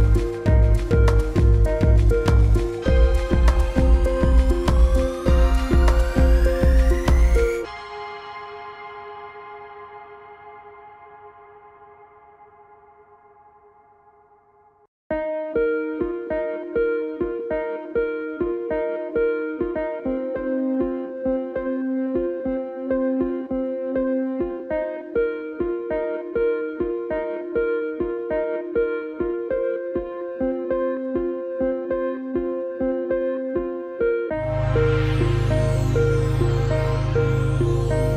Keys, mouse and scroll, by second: 0.5 click, 9.7 t, 11.1 click, 11.8 ctrl+a, 11.9-13.4 typing, 15.0 click, 18.6 click, 21.7 click, 23.5 click, 26.5 click, 28.5 ctrl+a, 30.2 click, 31.7 ctrl+d, 32.1 click, 33.7-34.2 scroll down 1, 34.2 scroll up 1, 34.8-35.2 ctrl+scroll up 1, 35.2 ctrl+s, 36.3 click.